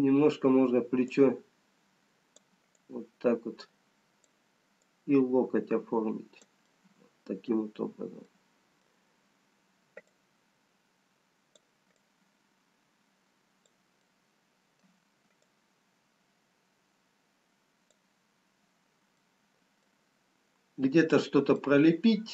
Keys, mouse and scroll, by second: 1.1 scroll up 2, 2.6 click, 3.9 click, 7.0 middle click, 8.6 middle click, 12.6 click, 14.4 middle click, 15.9 click, 19.4 middle click, 19.4-20.8 scroll down 1, 22.1 middle click, 22.1-22.3 scroll down 2.